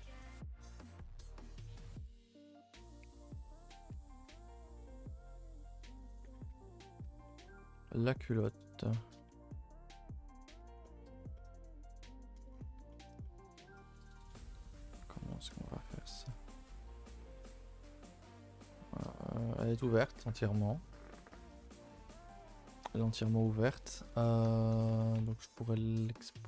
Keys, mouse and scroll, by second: 1.0 a, 1.1 a, 4.0 click, 4.1 a, 4.7 shift+middle click, 5.1 click, 5.6 click, 6.4 ctrl+i, 6.5 h, 6.8 Tab, 7.3 shift+middle click, 7.5 scroll up 4, 7.7 a, 7.8 a, 7.9-9.3 middle drag, 9.3 Tab, 9.5-10.7 middle drag, 10.7 Tab, 10.9 middle click, 11.2 scroll up 2, 11.4-12.5 middle drag, 12.5 scroll down 3, 12.8 Tab, 12.9-13.4 middle drag, 13.4 scroll down 1, 13.6 Tab, 13.8 middle click, 14.0 a, 14.2 a, 14.2-15.6 middle drag, 15.6 scroll up 2, 15.7 a, 15.9 a, 15.9-17.0 middle drag, 17.0 scroll down 2, 17.2 middle click, 18.1 scroll down 2, 18.3 middle click, 19.1 scroll up 1, 20.1-21.5 middle drag, 21.5 Tab, 22.3 Tab, 22.6 shift+middle click, 22.8-23.1 scroll up 3, 23.1 a, 23.3 a, 23.5 middle click, 23.7 scroll up 1, 24.0 scroll down 2, 24.2 Tab, 24.5 shift+middle click, 24.9 Tab, 25.2 a, 25.3 a, 25.4 middle click, 26.0 scroll down 2, 26.2 middle click.